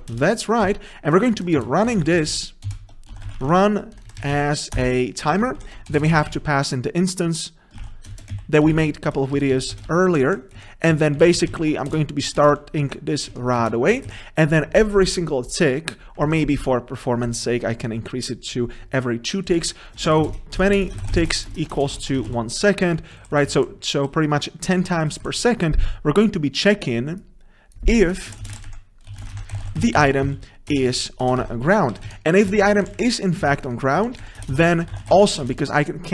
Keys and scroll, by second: 2.7 ctrl+BackSpace, 4.8 Return, 5.6 ctrl+shift+Right, 8.2 Return, 14.9 ctrl+shift+Right, 18.0 Escape, 30.9 Return.